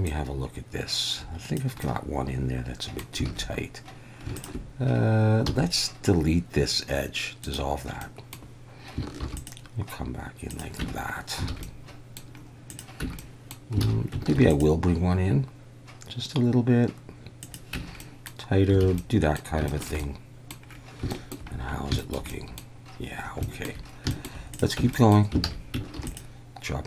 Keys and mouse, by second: 0.1-1.5 drag, 1.9-3.0 middle drag, 3.3 alt+a, 4.4 alt+shift+click, 5.5 x, 8.0-8.4 middle drag, 9.2 ctrl+r, 10.5 click, 10.8 Tab, 11.5 alt+a, 11.6 middle click, 12.7 click, 13.0 Tab, 13.2 middle click, 13.9 alt+a, 14.3 ctrl+r, 17.4 click, 17.7 Tab, 18.0 middle click, 18.8 alt+a, 19.0 click, 19.7 shift+click, 20.0 click, 21.1 shift+click, 22.0 shift+middle click, 22.3 middle click, 23.4 shift+middle drag, 24.1 shift+middle click, 24.8 Tab, 24.9 middle click, 25.4 alt+a, 25.9 ctrl+r.